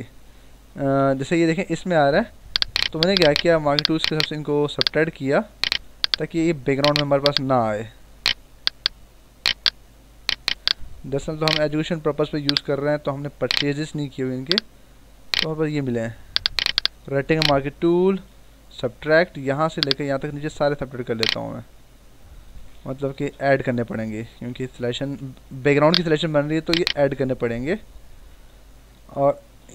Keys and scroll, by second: 0.9 ctrl+=, 22.5 ctrl+z, 24.2 ctrl+-, 28.8 ctrl+=.